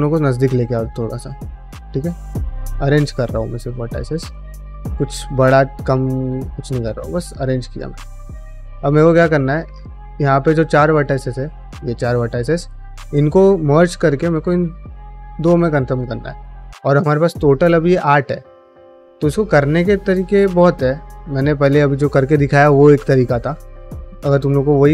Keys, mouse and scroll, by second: 0.0-1.3 typing, 0.5 click, 1.2 click, 1.8 middle click, 2.1 middle click, 2.4 g, 3.2 click, 3.3 g, 3.8 click, 4.0 g, 4.3 middle click, 5.0 click, 5.1 g, 5.5-7.6 middle drag, 8.0 middle click, 8.6 click, 8.8 g, 9.4 g, 9.9 click, 10.0 g, 10.6 click, 11.1 shift+click, 11.5 shift+click, 12.1 middle click, 12.5 shift+middle click, 14.1 click, 15.0 ctrl+middle click, 15.3 ctrl+middle click, 16.2 alt+click, 16.8 shift+middle click, 17.9 middle click, 23.7 click, 23.9 g, 24.7 click.